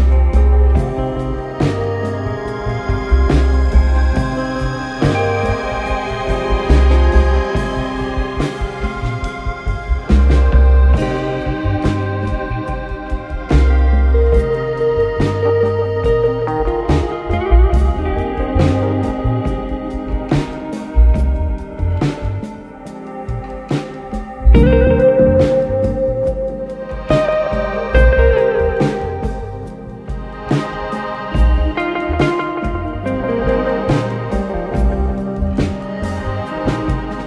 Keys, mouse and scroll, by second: 0.6 click, 1.6 click, 2.6 shift+click, 3.5 shift+click, 4.7 shift+click, 5.5 KP_1, 6.3 ctrl+KP_1, 7.1 scroll up 2, 7.2 scroll, 22.6-25.1 drag, 27.5 click, 28.6 click, 29.0 KP_1, 31.4 click, 32.1-32.9 scroll down 1, 33.4 ctrl+KP_3, 35.0 click, 36.4 click.